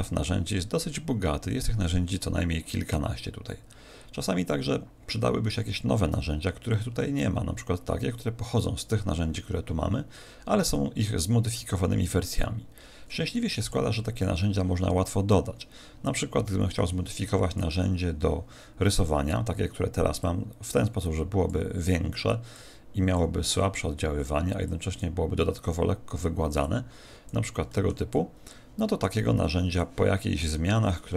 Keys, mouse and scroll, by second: 15.3 click, 20.2 click, 22.5 click, 24.6 click, 26.6 click, 27.7 middle click, 28.1 click.